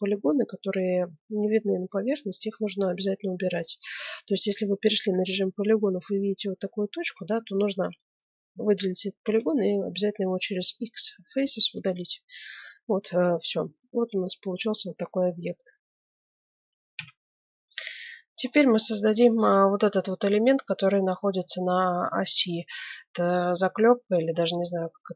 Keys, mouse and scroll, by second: 2.9-5.9 middle drag, 9.2 x, 10.9 middle click, 11.7 Tab, 12.7 z, 13.3-14.9 middle drag, 16.1 middle click, 16.8 KP_1, 16.9 F9, 17.6 middle click, 18.6 click, 18.7-25.1 middle drag.